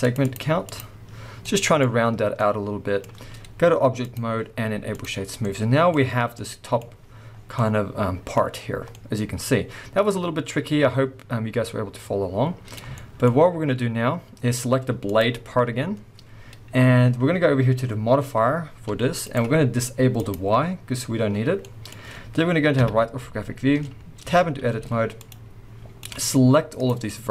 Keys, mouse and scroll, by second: 1.2 scroll down 2, 1.4-4.0 middle drag, 4.0-5.4 drag, 5.4-15.0 middle drag, 6.1 scroll down 1, 7.4 scroll down 1, 8.3-8.9 scroll up 2, 13.3-15.0 scroll up 2, 15.0 click, 15.5 scroll down 1, 18.8 g, 19.3 right click, 20.2 click, 21.6-24.2 middle drag, 22.8 KP_3, 23.5-24.1 scroll up 2, 24.1 scroll up 1, 24.2 Tab, 24.8 z, 25.6-26.0 scroll down 2, 26.0 click, 27.1 middle click.